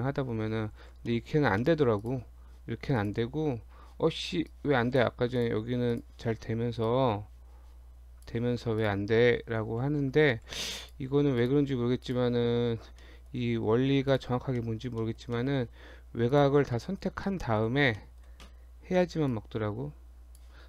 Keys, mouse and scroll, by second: 0.8 ctrl+z, 1.1 middle click, 1.6 middle click, 2.0 click, 3.0 click, 5.4 click, 5.9 click, 8.8 click, 9.9 ctrl+z, 10.5 ctrl+z, 10.8 click, 11.4 click, 12.0 alt+click, 12.8 alt+click, 13.0 middle click, 14.1 alt+shift+click, 14.2 alt+shift+click, 14.6 middle click, 15.0 middle click, 15.4 shift+middle click, 16.4 shift+click, 16.8 middle click, 17.3 middle click, 18.0 shift+middle click, 19.3 click.